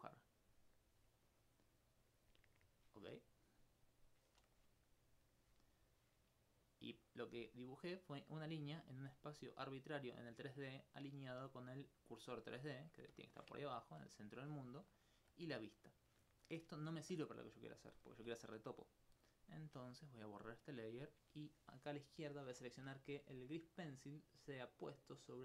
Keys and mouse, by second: 4.6-11.4 middle drag, 16.8 alt+click, 18.0 alt+click, 18.6 alt+d, 18.9 right click, 20.7 click.